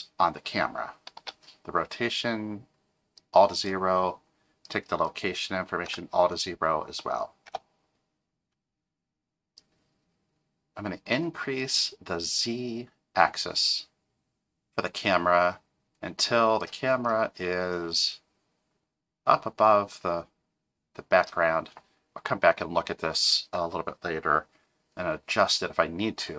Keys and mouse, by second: 4.8-8.4 drag, 9.6-16.6 drag, 18.1-21.2 drag.